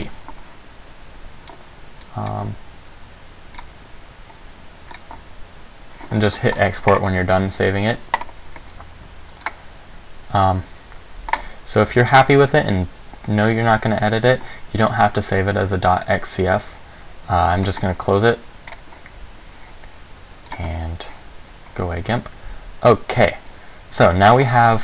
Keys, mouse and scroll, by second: 23.4 click.